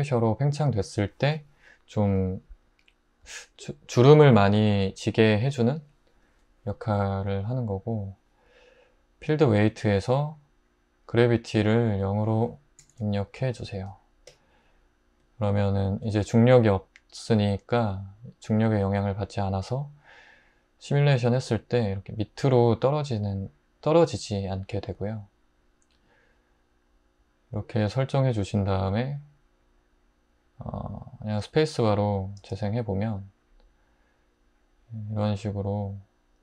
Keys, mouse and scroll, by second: 12.8 0, 12.9 Return, 32.4 space.